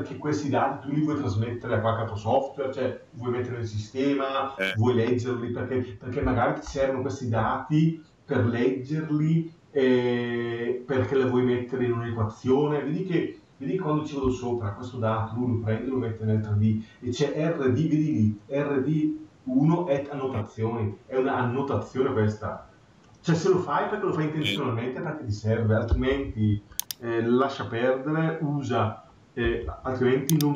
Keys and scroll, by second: 25.8 Escape.